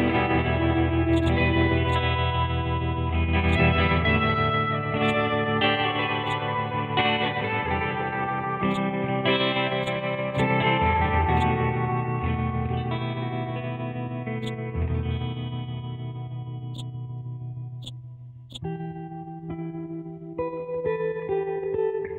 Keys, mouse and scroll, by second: 1.1-5.0 drag, 5.0-13.0 drag, 14.4 click, 16.7 click, 19.6 Left.